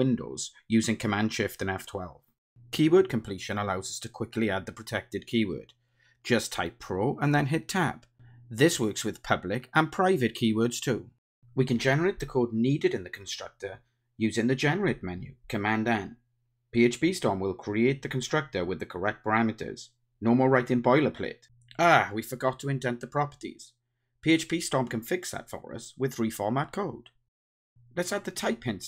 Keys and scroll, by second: 4.4 Tab, 13.3 super+n, 23.3 alt+super+l, 23.5 alt+super+l.